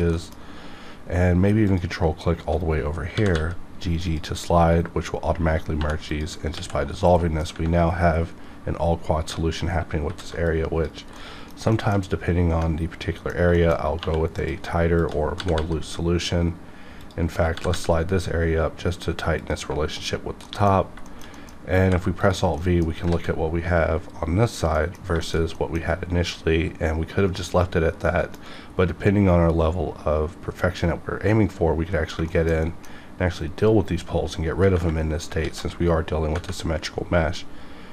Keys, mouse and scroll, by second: 0.1 middle click, 1.6 ctrl+click, 3.1 g, 3.3 g, 4.0 click, 5.8 2, 6.1 click, 6.5 ctrl+x, 7.0 middle click, 9.4 scroll down 1, 10.0 alt+v, 10.4 click, 11.2 middle click, 11.7 shift+middle click, 12.2 scroll up 1, 12.6 middle click, 13.5 shift+middle click, 13.7 shift+scroll up 1, 14.0 2, 14.4 click, 15.0 shift+click, 15.3 g, 15.5 g, 17.0 click, 17.5 g, 17.7 g, 19.4 click, 19.5 Tab, 20.2 scroll down 1, 20.4 middle click, 20.8 scroll down 1, 21.0 shift+middle click, 21.1 shift+middle click, 21.3 middle click, 21.8 alt+v, 22.2 click, 22.6 middle click, 23.2 alt+a, 24.7 middle click, 25.5 middle click, 25.9-27.6 scroll up 1, 28.0 middle click, 28.5 scroll up 1, 32.2 shift+Num_Lock, 32.2 scroll down 1, 32.3 shift+middle click, 32.6 middle click, 35.4 alt+x.